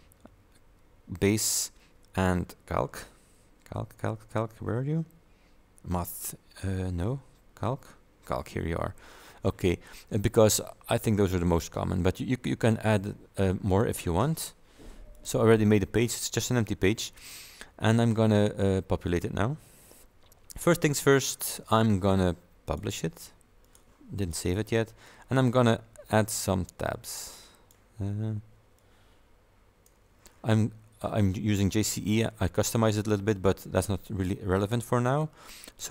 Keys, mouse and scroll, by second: 0.2 scroll down 2, 7.7 scroll down 2, 12.6 click, 15.2 click, 21.6 click, 22.8 click, 23.7 click, 24.3 click, 24.8-25.2 scroll down 1, 26.0 scroll down 2, 27.2 click, 28.8-30.1 drag.